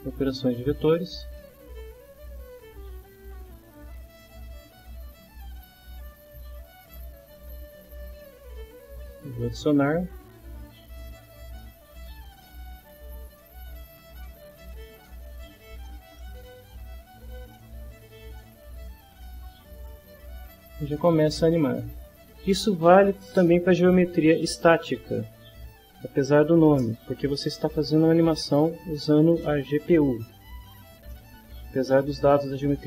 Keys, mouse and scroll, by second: 0.7 click, 1.9-3.1 drag, 3.8-5.1 drag, 6.6-8.4 drag, 10.0-11.7 drag, 16.2-21.6 middle drag, 31.1 middle click.